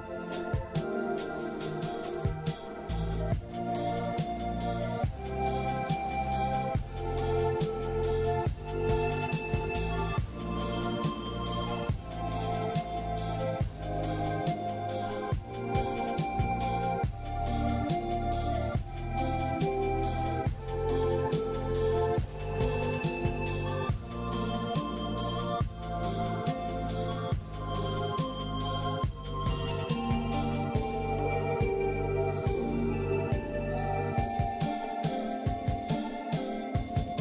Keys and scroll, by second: 6.1 ctrl+z, 7.6 ctrl+z, 8.4 ctrl+z, 10.3 ctrl+z, 11.0 ctrl+z, 13.7 ctrl+z, 14.1 ctrl+z, 14.8 ctrl+z, 15.5 ctrl+z, 16.2 ctrl+z, 16.9 ctrl+z, 18.0 ctrl+z, 19.0 ctrl+z, 19.7 ctrl+z, 20.6 ctrl+z, 22.0 ctrl+z, 23.5 ctrl+z, 24.5 ctrl+z, 25.7 ctrl+z, 28.0 ctrl+z, 29.7 ctrl+z, 30.2 ctrl+z, 30.6 scroll up 1, 31.1 ctrl+z, 31.9 ctrl+z, 32.8 scroll down 1, 34.6 ctrl+z, 36.3 scroll up 1, 36.6 scroll down 1.